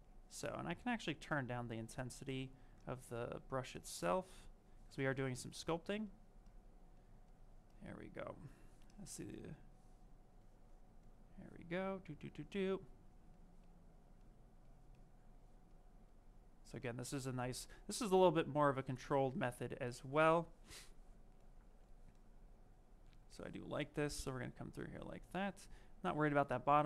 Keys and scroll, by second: 0.6 space.